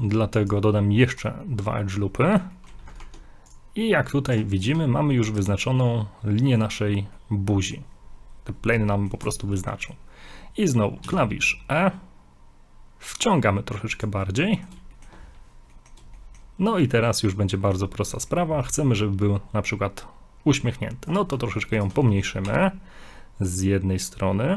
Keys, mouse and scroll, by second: 1.4 middle click, 2.5 middle click, 3.0 ctrl+Tab, 4.4 ctrl+Tab, 4.5 right click, 5.2 ctrl+right click, 5.6 ctrl+right click, 5.7 middle click, 7.2 middle click, 8.9 middle click, 9.8 middle click, 11.1 e, 14.4 middle click, 15.2 shift+middle click, 15.3 scroll up 2, 15.7 middle click, 16.2 shift+middle click, 17.0 middle click, 18.3 middle click, 21.1 right click, 21.8 ctrl+right click, 22.0 ctrl+right click, 22.1 middle click, 22.4 middle click, 22.5 g.